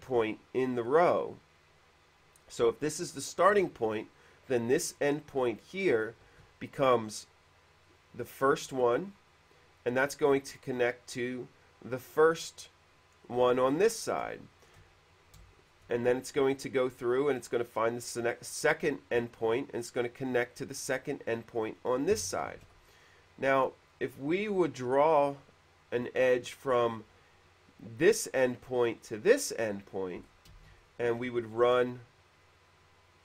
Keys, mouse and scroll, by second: 13.5 click, 14.6 shift+middle click, 15.6 shift+middle click, 17.7 click, 20.8 click, 22.3 middle click, 22.9 shift+e, 23.1 click, 23.7 click, 24.7 q, 26.7 click, 29.8 click, 30.5 middle click, 30.8 space.